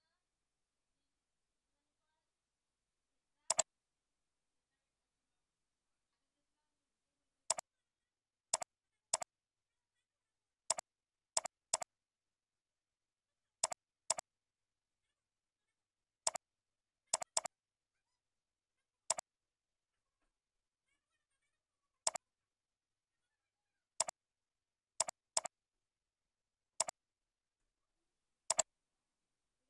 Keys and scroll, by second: 4.5 ctrl+Up, 8.4 ctrl+c, 10.3 ctrl+z, 13.1 ctrl+x, 18.1 ctrl+v.